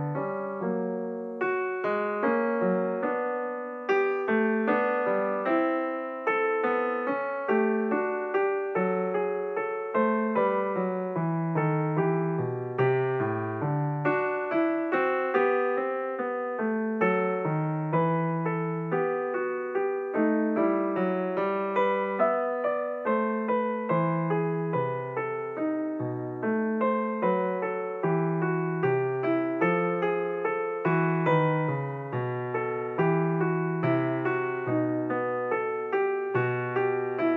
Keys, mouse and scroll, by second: 2.0 s, 3.2 click, 4.3 click, 6.6 g, 14.5 alt+click, 16.5 alt+click, 17.5 alt+click, 20.8 alt+shift+click, 22.3 alt+shift+click, 24.7 s, 31.7 KP_7.